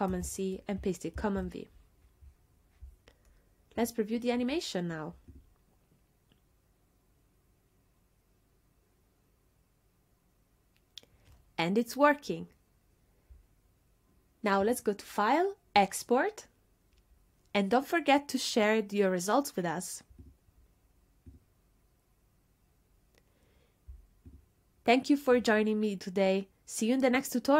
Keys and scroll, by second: 0.1 super+c, 1.2 super+v.